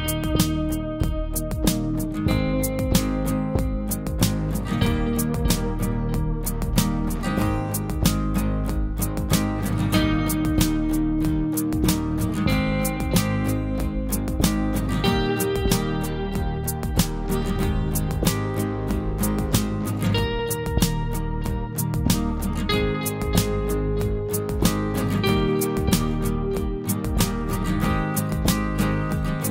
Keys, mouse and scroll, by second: 0.5 scroll down 1, 3.6 scroll down 1, 3.8 typing, 5.5 click, 6.5 scroll up 1, 7.1 typing, 8.4 click, 10.4 scroll down 1, 13.5 scroll up 1, 15.8-17.1 scroll down 1, 17.1 space, 17.5 click, 17.6 space, 18.9 scroll up 1, 23.3 click, 24.1 scroll down 1, 25.6 click, 26.1 scroll down 1, 28.1 scroll up 1, 28.1 typing.